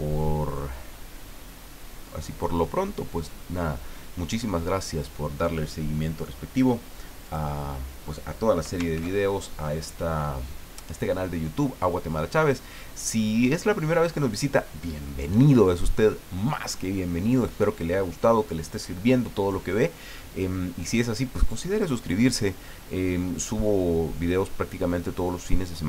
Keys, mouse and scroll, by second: 7.2 click, 8.9 ctrl+s.